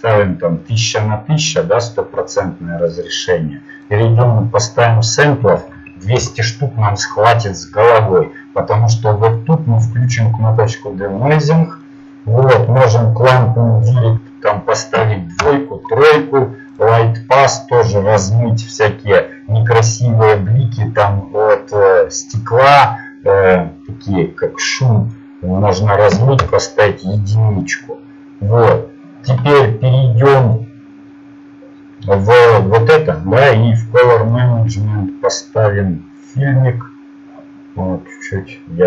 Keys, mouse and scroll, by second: 6.2 KP_0, 7.2-15.4 drag, 26.4-38.8 drag.